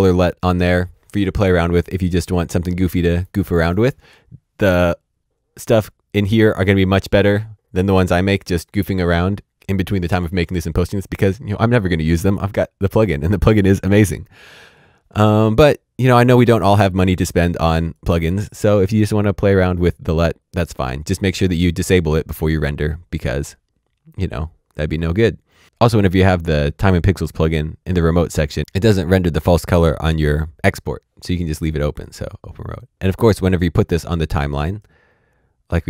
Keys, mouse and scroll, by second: 16.2 click, 21.7 click, 27.3 click, 31.9 click, 35.7 click.